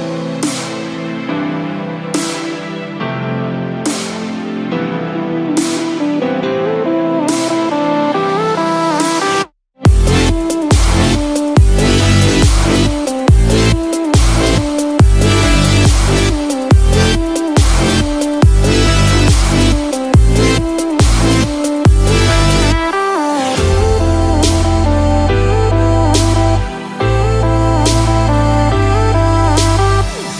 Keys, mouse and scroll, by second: 0.4-0.9 scroll up 2, 0.9 middle click, 5.2 click, 5.5-8.6 shift+click, 12.2 p, 13.6 i, 20.5 t, 23.9 click, 25.3 space, 28.4 click.